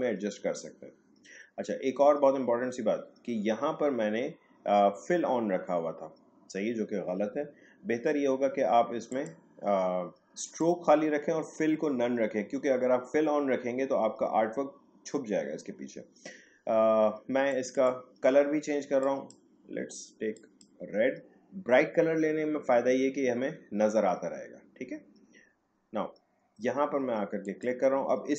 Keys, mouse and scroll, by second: 9.1 click, 17.5 click, 17.9 click, 27.4 click.